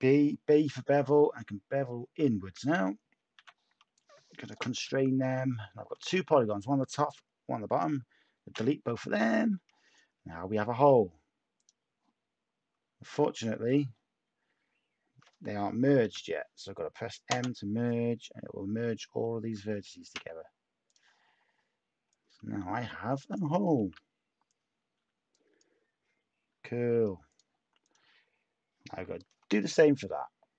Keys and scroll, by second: 3.3 h, 4.8 Tab, 11.5 Delete, 12.7 Tab, 16.0 m, 17.3 Return, 20.1 Tab, 26.4 a.